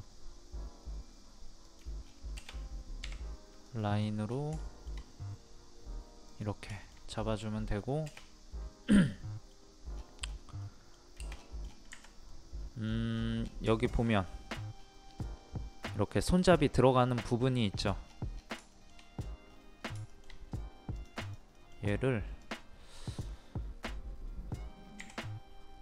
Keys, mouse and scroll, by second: 2.0-2.4 scroll down 1, 3.6 click, 3.9 scroll down 1, 4.0 scroll up 1, 4.2 scroll down 1, 4.6 shift+middle click, 5.4 scroll up 1, 6.3 click, 6.8 shift+middle click, 8.1-8.5 scroll up 1, 8.5 scroll down 1, 9.1 middle click, 9.9 scroll down 1, 10.6 middle click, 11.3-11.7 scroll down 1, 11.7 scroll up 1, 11.9 Escape, 12.2 scroll down 1, 12.3 middle click, 12.8 scroll down 1, 13.7 shift+middle click, 14.7 scroll up 1, 17.7 scroll down 1, 18.7 shift+middle click, 19.2 scroll up 1, 20.1 shift+middle click, 20.3 shift+scroll up 2, 20.9 click, 21.5 middle click, 22.4 click, 25.0 p.